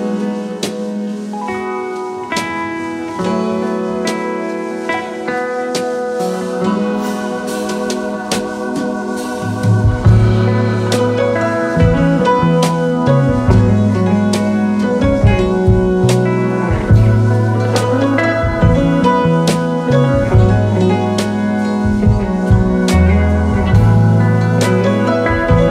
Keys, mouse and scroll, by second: 4.5 Delete, 12.8 ctrl+h, 13.6-13.9 alt+scroll down 3, 14.3-14.8 alt+scroll up 3, 16.8-18.0 alt+scroll up 14, 18.1-19.1 space, 20.9 alt+scroll up 1.